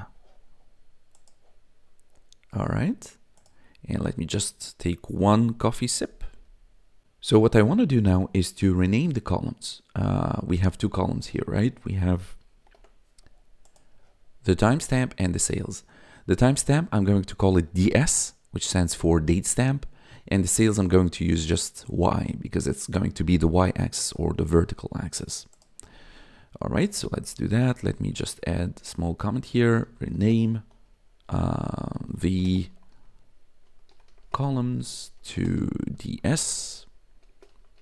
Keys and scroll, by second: 12.6 ctrl+b, 27.6-37.8 typing.